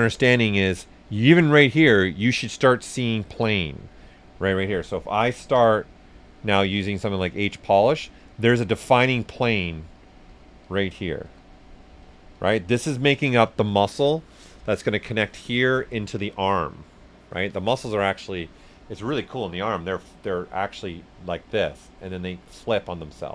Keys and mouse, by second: 5.0-6.0 typing, 7.0 click, 7.6 s, 7.7 click, 8.6 s, 8.6 click, 11.2 s, 11.3 click.